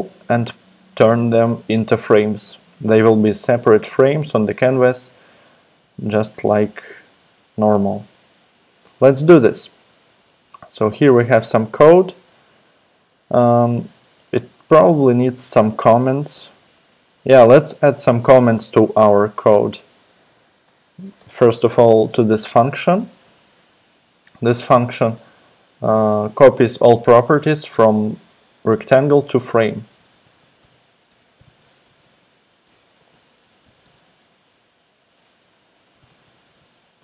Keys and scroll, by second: 4.7 super+Tab, 20.6 Return, 21.2-23.1 typing, 22.3 Tab, 29.7-37.0 typing.